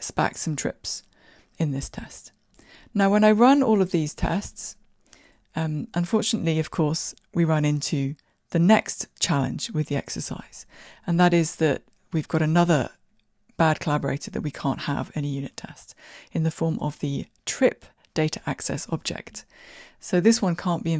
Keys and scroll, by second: 6.2 ctrl+r, 6.2 shift+F10.